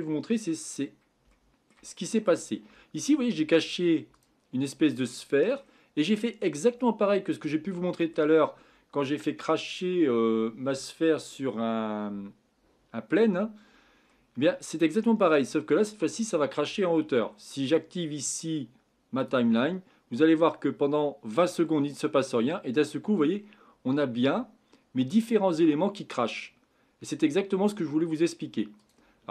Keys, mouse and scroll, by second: 0.7 scroll up 5, 1.3-2.5 shift+middle drag, 2.5-3.2 scroll up 4, 3.2-4.1 middle drag, 4.1 click, 4.6-5.9 middle drag, 5.9-6.8 scroll down 8, 6.8-10.8 middle drag, 13.2-14.1 scroll down 2, 14.1-17.1 middle drag, 19.2 click.